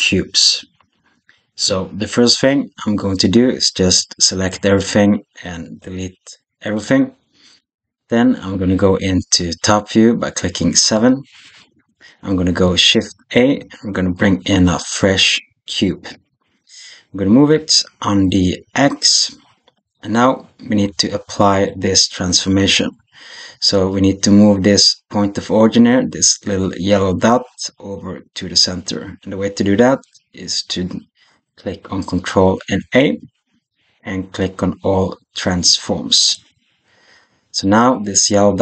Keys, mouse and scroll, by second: 4.4 a, 5.6 x, 10.8 KP_7, 13.2 shift+a, 17.4 g, 21.0 shift+click, 32.6 ctrl+a.